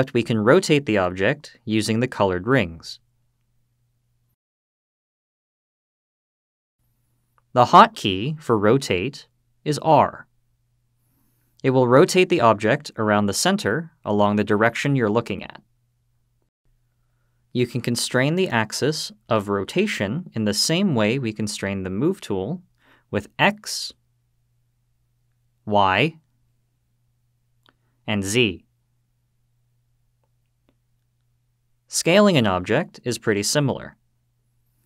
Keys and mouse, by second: 2.6-3.4 drag, 4.3-5.0 drag, 5.9-6.6 drag, 9.5 r, 15.9 click, 22.2 r, 23.2 x, 25.6 y, 27.9 z, 30.6 click.